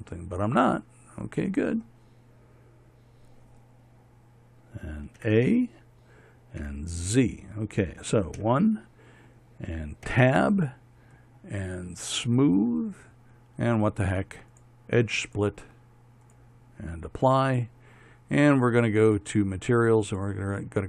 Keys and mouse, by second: 5.9 a, 7.3 z, 9.1 KP_1, 10.7 Tab.